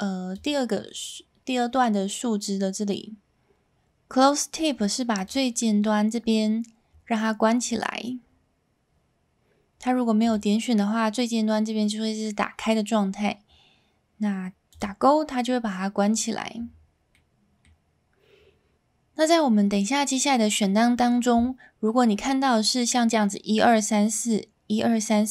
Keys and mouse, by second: 5.2 click, 7.1-7.5 middle drag, 10.2 click, 14.7 click, 17.1-17.6 middle drag.